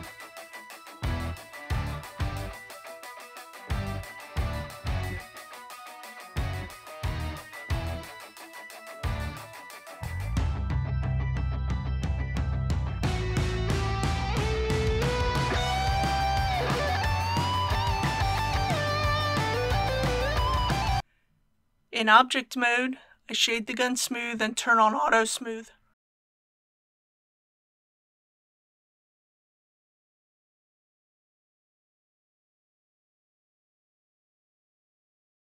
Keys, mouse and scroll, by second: 0.2 alt+shift+click, 0.4 middle click, 0.7 middle click, 0.9 middle click, 1.3 scroll down 1, 1.5 alt+shift+click, 1.9 middle click, 2.3 alt+shift+click, 2.5 middle click, 2.9 click, 3.4 KP_3, 3.7 click, 3.8 Tab, 4.1 KP_1, 4.3 alt+a, 4.4 shift+middle click, 4.9 click, 5.1 middle click, 5.4 KP_1, 5.7 ctrl+z, 6.3 ctrl+b, 9.7 click, 13.2 KP_Decimal, 13.4 KP_0, 14.4 Tab, 15.4 KP_6, 15.7 Tab, 18.3 click, 20.7 Tab, 21.0 KP_1, 21.1 click, 21.5 ctrl+click, 21.8 ctrl+click, 22.2 ctrl+click, 22.6 ctrl+click, 22.8 ctrl+click, 23.1 ctrl+click, 23.4 ctrl+click, 23.9 right click, 24.8-35.4 drag.